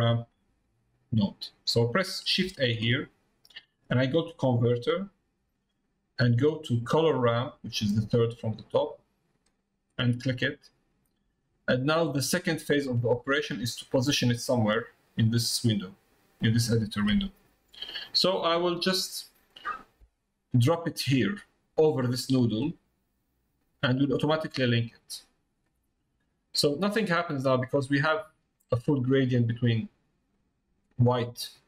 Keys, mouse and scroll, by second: 24.4-25.5 middle drag.